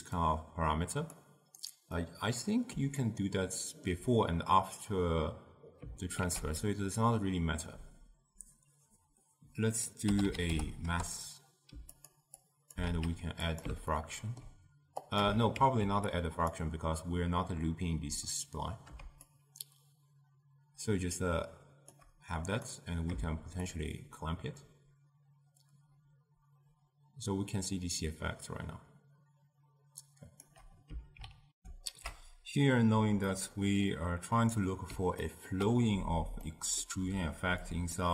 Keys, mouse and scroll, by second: 0.3 drag, 2.0-6.2 middle drag, 6.3 ctrl+a, 12.5 click, 12.9 shift+d, 14.0-15.1 ctrl+middle drag, 15.1 click, 15.6 ctrl+x, 16.2 click, 19.3-22.4 shift+drag, 22.5 click, 23.8-26.8 shift+drag, 31.6 ctrl+alt+shift+q, 33.3-37.7 middle drag, 37.7 shift+click.